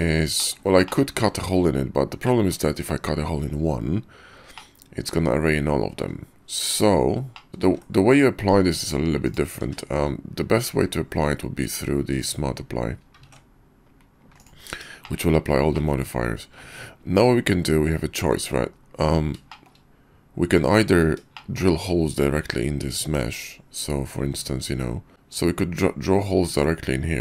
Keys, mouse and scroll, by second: 0.4 shift+middle click, 0.8 shift+click, 2.2 middle click, 2.7 KP_5, 4.6-5.8 drag, 5.8 middle drag, 7.3 middle click, 7.5 ctrl+z, 7.7 ctrl+`, 9.6 q, 13.3 ctrl+`, 15.0 shift+middle drag, 15.5-15.9 middle drag, 15.7 click, 15.9 click, 16.0 middle click, 16.1 click, 16.6-18.1 middle drag, 18.2 `, 18.4-18.7 middle drag, 18.7 KP_5, 19.0 middle click, 21.3 shift+middle click, 25.1 ctrl+z, 25.1 alt+w, 26.7-27.2 ctrl+drag.